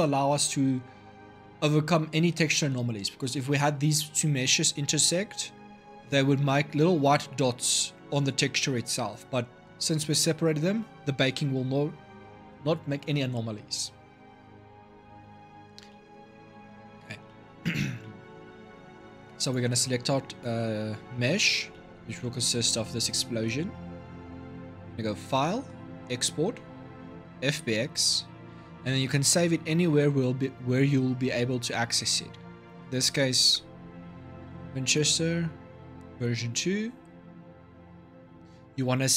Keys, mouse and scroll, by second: 2.3-7.2 middle drag, 14.5-15.0 scroll down 3, 15.0-15.9 middle drag, 15.9-16.3 scroll down 3, 16.3-19.2 middle drag, 19.2 click, 21.2-21.5 scroll down 1, 21.5-24.9 shift+middle drag, 24.9-39.1 drag.